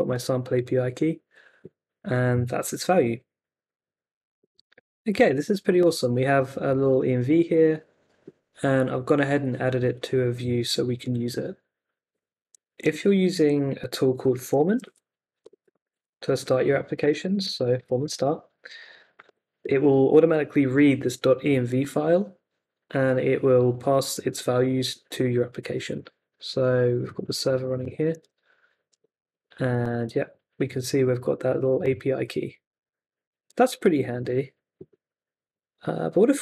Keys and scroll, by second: 0.1 super+s, 12.8 super+Tab, 14.2-19.6 typing, 28.2 super+Tab, 29.9 super+r.